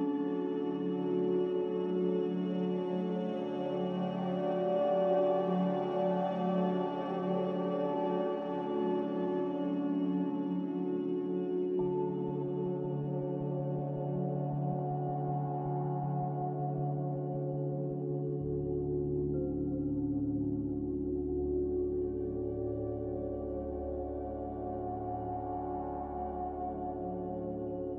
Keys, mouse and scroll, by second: 21.9 m, 23.3 click, 26.5 Escape.